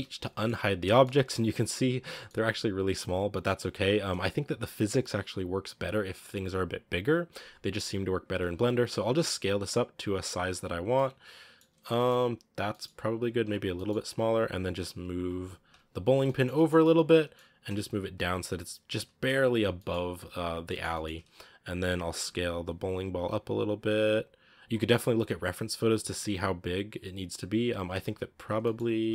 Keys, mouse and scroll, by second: 0.1-0.5 middle drag, 0.5 a, 0.8 middle click, 0.9 scroll down 1, 1.0 shift+middle drag, 1.3-2.7 scroll up 9, 2.0 shift+middle drag, 3.3 right click, 3.6 scroll down 5, 3.7 scroll up 1, 8.7 s, 10.7 scroll down 1, 10.8-11.5 middle drag, 11.5 scroll up 2, 11.7 middle click, 11.9-12.6 scroll down 2, 12.6-13.0 middle drag, 13.0 s, 13.6 g, 15.6 KP_Decimal, 16.1-17.4 shift+middle drag, 17.4 g, 19.2-19.6 scroll down 7, 19.6 middle drag, 19.8 scroll up 3, 20.1 a, 20.4 scroll down 3, 20.5-21.6 shift+middle drag, 21.6-22.0 right drag, 22.0 s, 25.5-26.2 right drag, 26.8 right click, 27.7 g, 28.5-28.9 middle drag, 28.9 s.